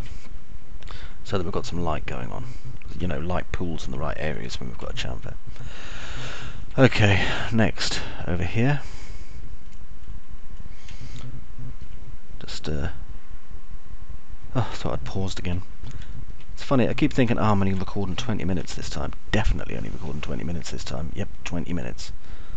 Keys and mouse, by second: 0.0-2.0 alt+middle drag, 3.6-5.0 alt+middle drag, 5.6 middle click, 6.6-7.6 alt+middle drag, 8.3 alt+middle click, 9.0 middle click, 9.3 alt+middle click, 13.0 alt+middle click, 16.6 alt+middle click, 17.6 middle click, 18.6 middle click, 19.3 alt+middle click, 20.6-21.6 alt+middle drag.